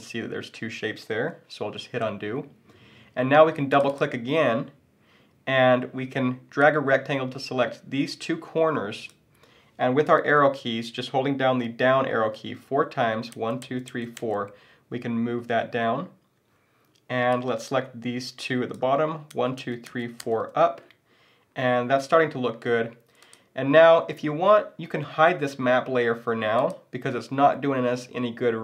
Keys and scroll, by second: 1.8 super+z.